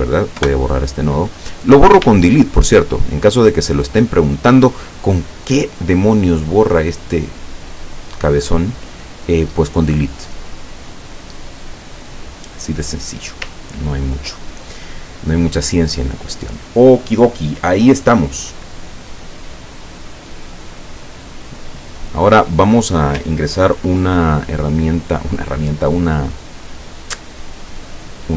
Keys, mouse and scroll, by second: 0.4 Delete, 1.7 click, 3.2 shift+click, 7.9-13.5 drag, 13.7 ctrl+scroll down 2, 20.8 click, 25.3 click, 27.8-28.3 drag.